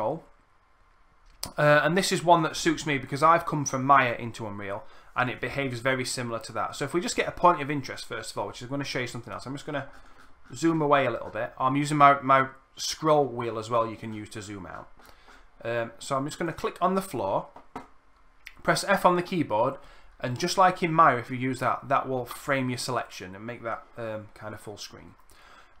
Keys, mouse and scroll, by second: 12.1-16.7 middle drag, 12.1-12.6 scroll, 12.9 scroll, 17.0 middle click, 18.8 f.